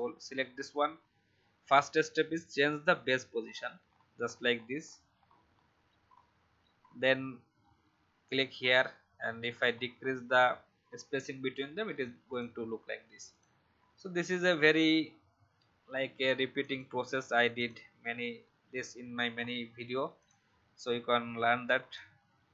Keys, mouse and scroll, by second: 3.4-3.8 shift+scroll down 1, 4.8-8.2 shift+scroll down 1, 8.2 click, 9.2-11.9 shift+scroll down 1, 12.3 click, 15.9-16.4 alt+scroll down 1, 16.6 click, 19.3-20.1 alt+scroll up 1, 20.1-22.5 drag.